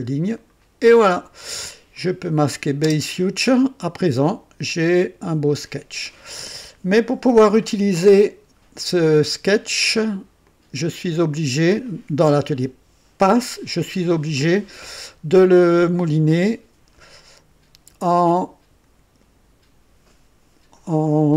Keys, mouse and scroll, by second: 0.3 click, 2.4 click, 2.8 space, 10.4 click.